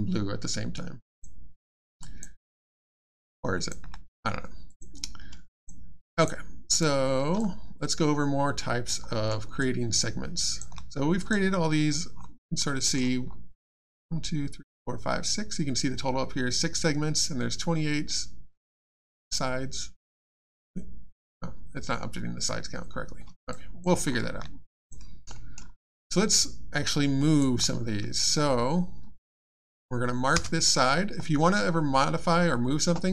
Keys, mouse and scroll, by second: 1.0 click, 2.0 alt+click, 2.4 alt+middle click, 2.6 alt+scroll down 2, 2.9 alt+click, 4.7 click, 6.1 click, 7.4 alt+click, 9.1 alt+middle click, 9.6 alt+click, 11.2 click, 12.1-12.4 scroll down 1, 12.7 middle click, 13.2 scroll down 1, 23.5 click, 24.7 click, 25.3 middle click, 25.9 alt+click, 28.2-29.3 scroll down 1, 30.3 space.